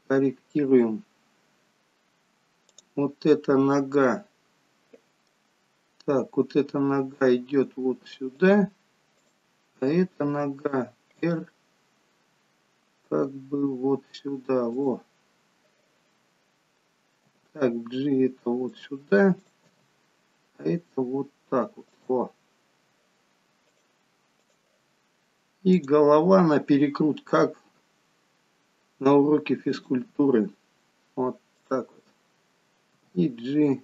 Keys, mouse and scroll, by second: 0.1 middle click, 1.5 scroll down 3, 2.8 click, 5.1 middle click, 5.1 scroll up 5, 5.7-6.8 scroll down 3, 7.0 g, 9.4 click, 10.5 r, 13.4 g, 17.3 g, 19.5 click, 19.9 g, 25.9 click, 27.5 r, 31.7 click, 33.1 g.